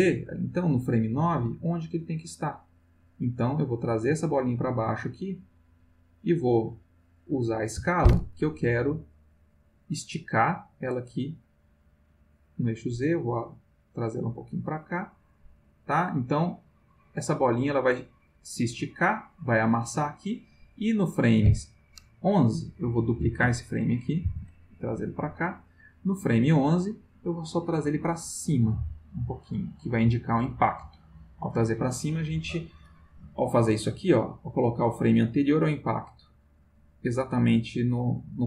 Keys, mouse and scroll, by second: 2.9 click, 4.0-6.3 drag, 7.3 click, 9.1 click, 10.3-11.7 drag, 12.2-13.8 drag, 14.8 click, 15.8-18.0 drag, 22.8 click, 24.2 shift+d, 25.2 click, 25.6 click, 27.7-30.2 drag, 30.8 click, 34.0 click.